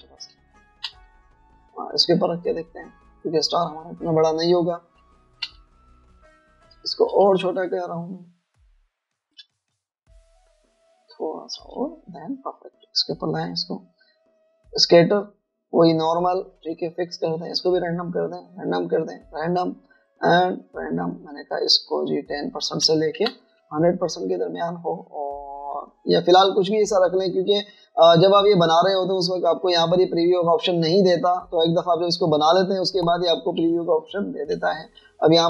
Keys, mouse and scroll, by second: 1.2 alt+scroll down 2, 1.4 space, 4.2 alt+scroll down 1, 4.3 alt+scroll up 1, 4.5 alt+scroll down 1, 4.6-4.9 alt+scroll up 1, 4.9-5.6 alt+scroll down 1, 5.6 alt+scroll up 1, 6.7-7.5 alt+scroll up 2, 7.8-9.2 typing, 9.4 alt+shift+click, 11.9 alt+click, 18.6 double click, 19.7 double click, 23.0 double click, 23.9-25.3 typing, 33.8 alt+scroll down 1.